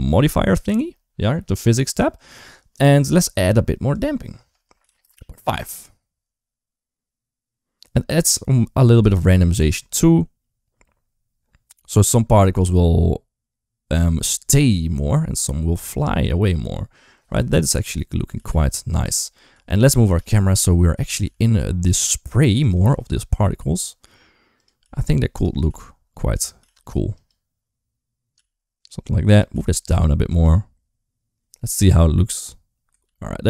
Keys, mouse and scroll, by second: 3.7-4.9 drag, 8.1-9.4 drag, 17.7 click, 18.2 g, 20.0 g, 21.1 g, 22.7 r, 24.6 g, 25.4 r, 26.4 g, 28.2 g, 29.4 g, 33.3 ctrl+s.